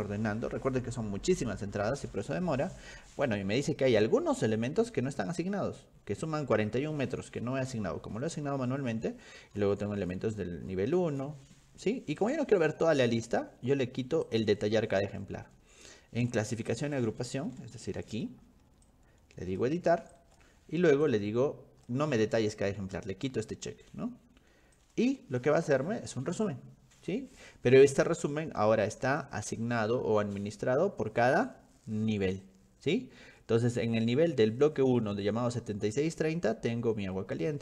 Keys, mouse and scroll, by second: 3.3-3.8 scroll down 4, 3.9-4.4 scroll up 4, 5.2-5.7 scroll down 2, 7.8-8.6 scroll down 6, 9.3-11.4 scroll down 16, 12.2 click, 14.3 click, 16.7 click, 17.6 ctrl+1, 18.1 click, 18.9 ctrl+click, 20.1 ctrl+shift+click, 21.1 click, 24.8 click, 30.9-32.6 scroll up 10.